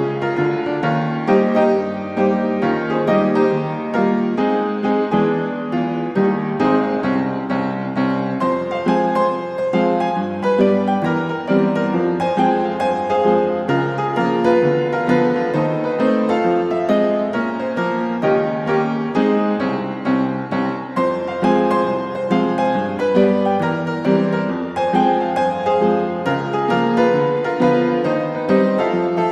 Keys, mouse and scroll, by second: 0.4-1.4 drag, 2.0-3.2 drag, 4.3 s, 5.2 click, 6.3 click, 7.2 click, 8.3-8.9 typing, 9.2 Return, 13.0-13.6 scroll, 13.6 Escape, 15.8 click, 16.4 s, 17.6 click, 18.5 click, 21.0-21.4 typing, 22.1 Return, 26.6 click, 28.8-29.3 drag.